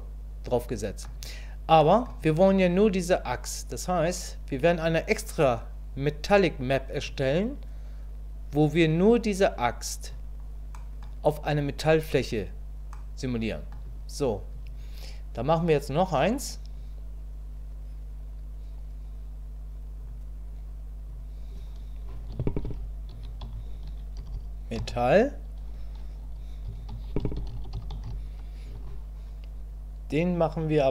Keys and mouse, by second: 1.8 middle click, 5.0-7.1 drag, 10.7 click, 12.9 click, 20.0-30.9 drag.